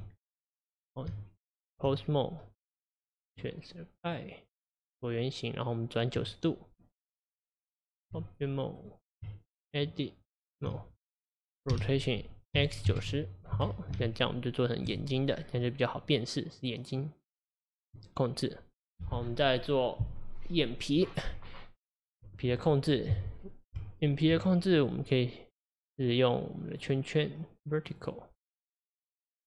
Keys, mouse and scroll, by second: 0.0 Tab, 0.4 click, 1.1 Tab, 3.2 click, 8.8 click, 9.3 Tab, 11.8 r, 14.9 Tab, 15.4-15.7 scroll down 1, 15.7-18.2 middle drag, 18.2 scroll up 2, 21.9 click, 23.8 Tab, 24.8 click, 26.7 click.